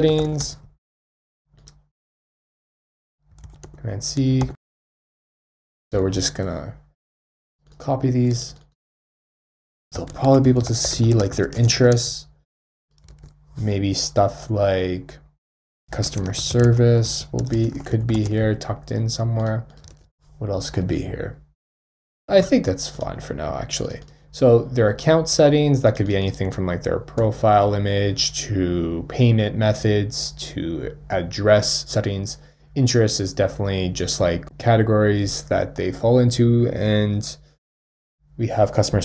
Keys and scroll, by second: 3.4 super+c, 3.6 super+v, 6.0 super+v.